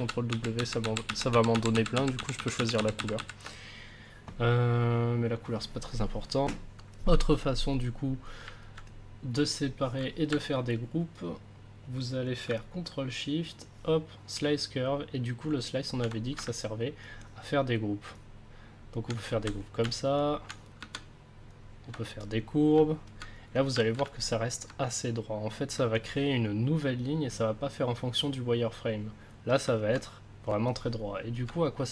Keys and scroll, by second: 12.9 ctrl+s, 16.4 ctrl+s.